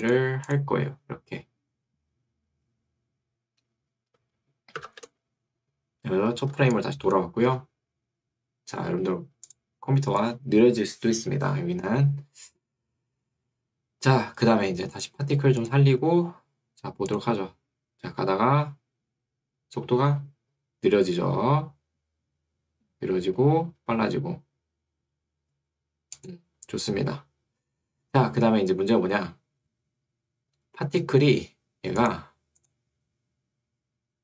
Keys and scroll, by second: 7.5 Escape.